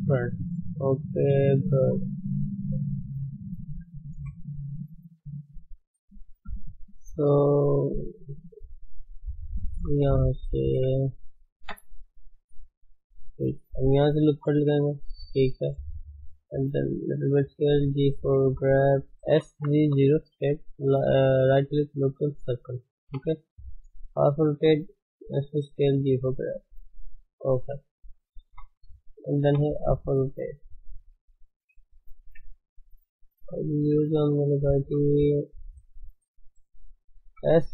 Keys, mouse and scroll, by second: 0.3-2.3 middle drag, 2.3 shift+middle click, 2.7 middle click, 2.9-4.2 middle drag, 4.2 KP_1, 5.0 click, 5.3 scroll down 3, 5.5-6.8 shift+middle drag, 6.8 scroll up 1, 7.0-7.4 scroll down 2, 7.4 shift+middle click, 7.7 scroll up 2, 9.3 click, 10.7 Tab, 11.5 Tab, 12.2 shift+z, 12.9 shift+z, 14.2 ctrl+r, 15.8 s, 17.7 g, 19.3 s, 22.0-23.0 right drag, 23.0 r, 24.0 s, 25.1 g, 26.9-28.4 middle drag, 28.4 KP_3, 29.4 r, 30.7 shift+middle click, 31.3 click, 32.6 shift+z, 34.4 click, 34.7 s, 36.3 shift+click, 37.3 s.